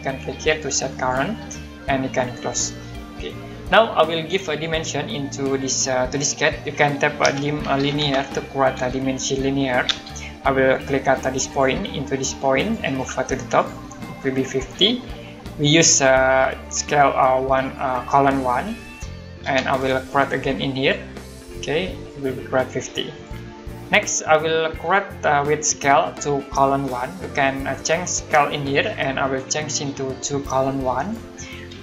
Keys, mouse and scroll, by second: 0.9 click, 3.5 middle click, 7.0-8.4 typing, 9.9 space, 11.5 click, 19.5 space, 20.8 click, 28.6 click, 31.0 click.